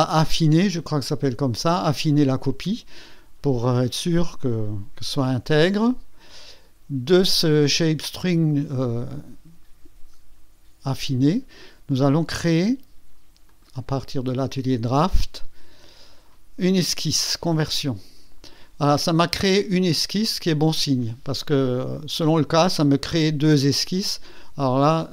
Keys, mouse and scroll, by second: 5.5 click, 7.1 click, 13.5 click, 14.4 click, 17.5 click.